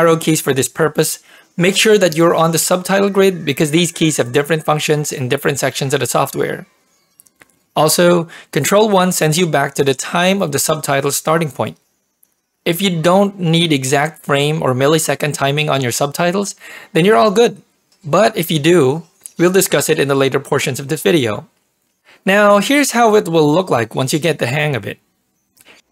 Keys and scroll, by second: 2.1 Right, 2.2 Right, 2.4 Right, 4.5 Left, 4.7 Left, 4.9 Left, 6.0 Right, 6.3 Right, 6.5 Left, 6.7 Right, 7.0 Right, 7.2 Left, 7.4 Left, 9.5 ctrl+1, 12.8 ctrl+1, 16.2 ctrl+1, 19.2 ctrl+1.